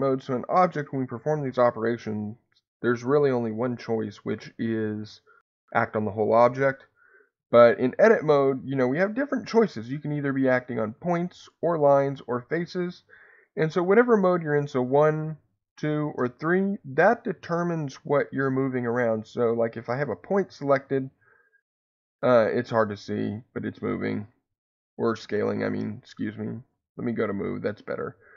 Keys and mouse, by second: 9.9 click, 12.0 3, 13.9 1, 16.1 3, 19.1 1, 21.2-25.4 drag, 25.3 Escape, 26.6 click, 27.8-28.3 drag.